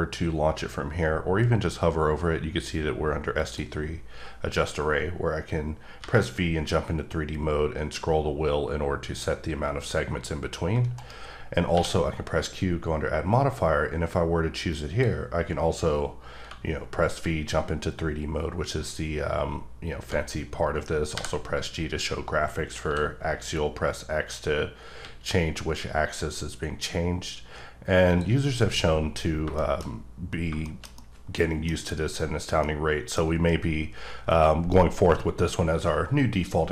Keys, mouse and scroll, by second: 3.4 click, 3.7 click, 6.0 v, 7.2-8.0 scroll up 2, 8.6-9.4 scroll up 1, 9.4-9.9 scroll down 2, 9.9-10.3 scroll up 2, 10.3-10.9 scroll down 1, 10.9 right click, 11.7 q, 14.7 click, 17.2 v, 17.9-18.7 scroll up 4, 19.3-21.1 scroll up 1, 21.1 g, 22.8 x, 25.0 x, 28.1 click, 29.0-29.6 scroll down 3, 29.6 shift+middle click, 29.9-30.4 scroll up 1, 30.4 shift+scroll down 1, 30.6 shift+middle click, 32.1-32.6 scroll up 1, 32.6 middle click.